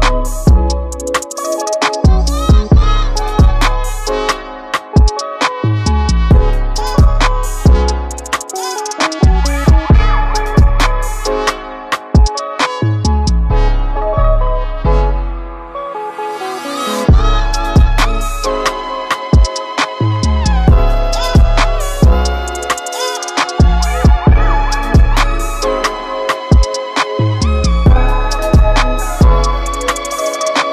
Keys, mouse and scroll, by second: 0.0-11.5 drag, 16.1 ctrl+v, 17.6-20.6 drag, 22.7 ctrl+z, 25.1-30.7 drag.